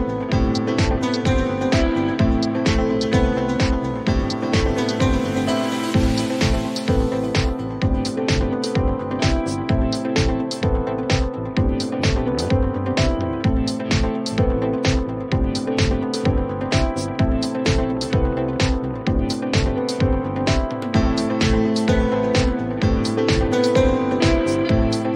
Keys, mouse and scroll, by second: 1.3-2.4 drag, 2.8-4.5 drag, 4.6-6.6 drag, 6.7 click, 9.3 click, 9.7 click, 10.2 click, 11.0 click, 11.6 click, 12.9 click, 16.6 click, 19.8 click, 20.6 click, 22.0 click, 24.0 ctrl+c.